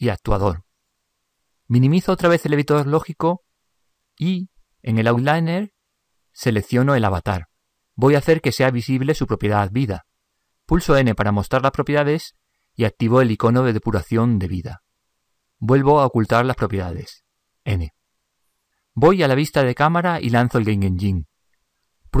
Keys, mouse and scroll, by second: 7.7-17.1 drag, 17.1 n, 19.5 KP_0, 20.4-22.2 middle drag.